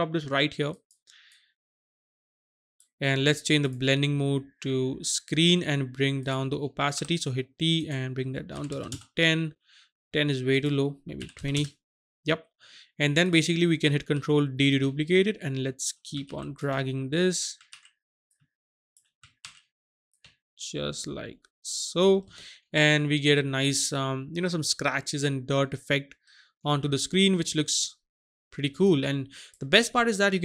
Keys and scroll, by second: 7.0 t, 8.6 KP_1, 8.8 KP_0, 8.9 Return, 11.2 KP_2, 11.6 Return, 14.2 ctrl+d, 14.8 ctrl+shift+d, 16.1 ctrl+shift+d, 16.7 ctrl+shift+d, 17.5 ctrl+shift+d, 18.3 ctrl+shift+d, 19.2 ctrl+shift+d.